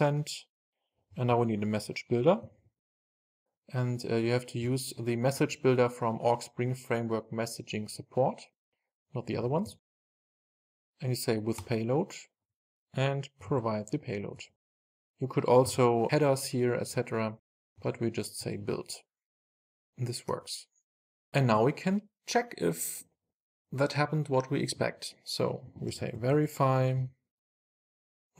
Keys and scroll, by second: 9.9 Return, 14.6 Return, 14.8 super+s, 17.9 Return, 18.5 super+s.